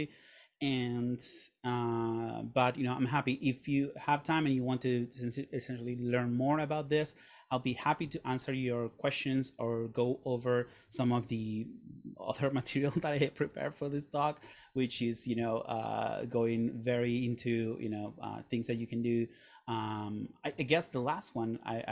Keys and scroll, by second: 11.4 super+., 13.1 super+., 13.5 super+/.